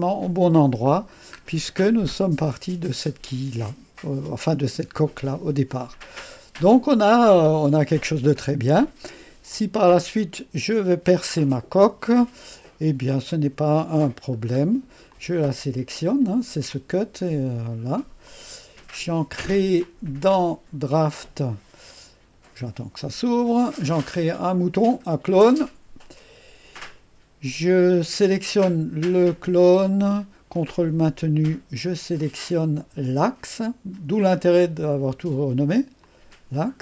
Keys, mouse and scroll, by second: 0.0-1.0 middle drag, 1.0-1.8 scroll down 1, 5.8-6.4 scroll up 1, 6.4-8.5 right drag, 8.5 scroll up 1, 8.5-9.7 scroll down 1, 9.7 scroll down 1, 14.3-14.8 scroll down 2, 15.2 click, 16.7 click, 18.3 click, 19.9 click, 21.0 click, 21.7 click, 24.9 click, 26.2-26.7 scroll down 2, 30.9-31.7 scroll up 2, 31.7-32.0 scroll up 1, 36.1 click.